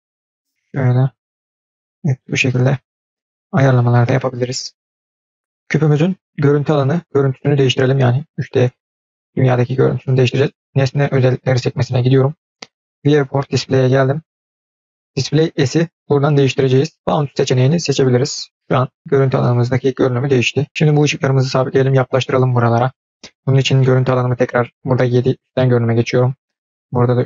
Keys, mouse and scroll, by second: 5.6 click, 10.2 click, 12.7 click, 13.2-14.7 scroll down 7, 15.5-17.9 drag, 24.7 KP_7, 25.3-26.2 scroll up 5, 26.9 KP_3.